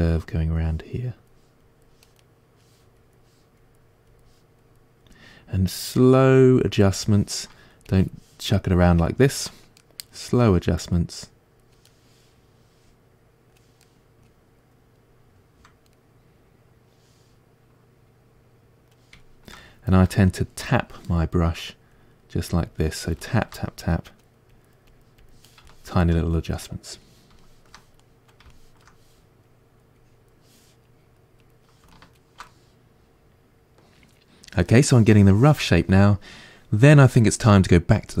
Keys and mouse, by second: 2.2 middle click, 3.0-6.0 drag, 6.0-7.9 middle drag, 7.9-9.8 drag, 9.3 ctrl+z, 9.8-11.2 middle drag, 11.2 click, 11.9-21.6 middle drag, 21.6-23.2 drag, 23.2-24.5 shift+middle drag, 24.5-25.7 drag, 25.7-29.5 shift+middle drag, 29.5-31.9 drag, 31.9-38.2 ctrl+middle drag.